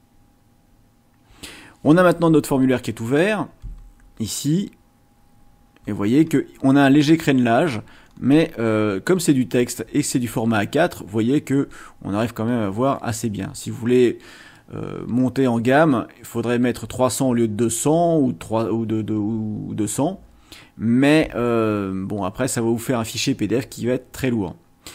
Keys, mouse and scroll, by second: 3.6-4.5 ctrl+scroll up 4, 5.8 ctrl+scroll up 2, 7.6-8.3 ctrl+scroll down 4, 9.7 ctrl+scroll down 2, 11.1 ctrl+scroll up 2, 11.8 ctrl+scroll up 2.